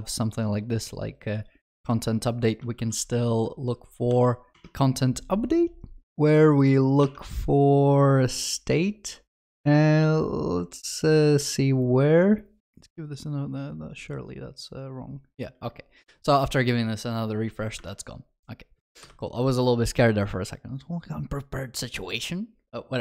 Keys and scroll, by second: 2.9 ctrl+shift+f.